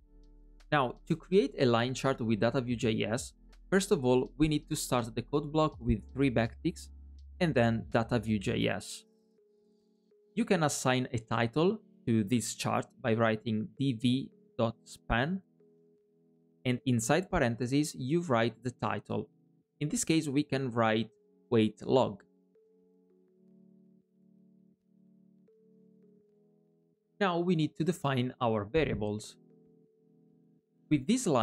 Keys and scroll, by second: 6.0 alt+\.